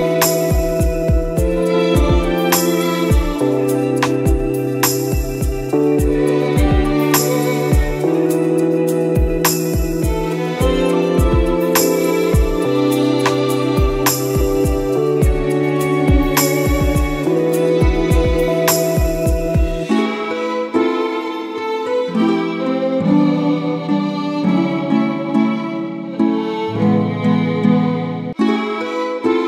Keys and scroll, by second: 3.3 space, 6.0 ctrl+z, 8.9 space, 15.1 ctrl+-, 19.3 ctrl++, 25.0 Delete, 26.4 ctrl+z, 28.0 ctrl+z.